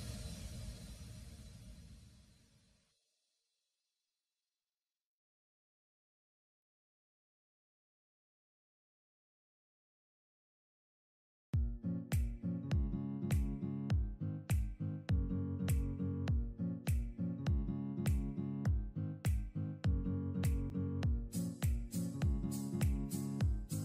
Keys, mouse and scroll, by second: 8.4 ctrl+click, 9.1 ctrl+e, 11.2 ctrl+j, 12.8 ctrl+m.